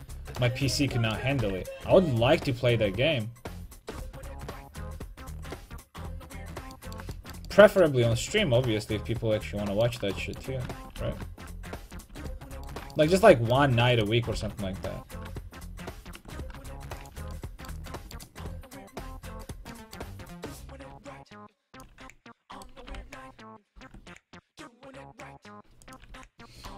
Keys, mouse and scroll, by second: 0.4 right click, 1.5 g, 5.6-6.8 middle drag, 8.5-10.2 middle drag, 11.0 g, 12.2 a, 14.0-17.0 right drag, 14.5 g, 17.1-18.9 drag, 17.2 a, 17.4-18.9 middle drag, 19.5 right click, 20.7-21.9 middle drag, 21.9 click, 22.6-25.9 right drag, 22.9 g, 26.0-26.7 drag, 26.2 a.